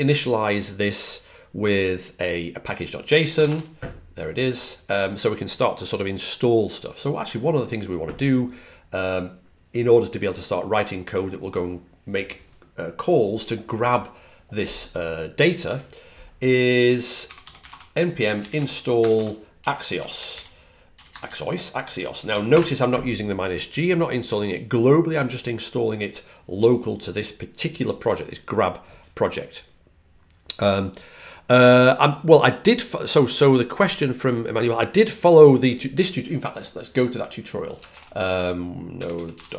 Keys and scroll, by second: 16.8-22.7 typing, 39.0-39.5 typing.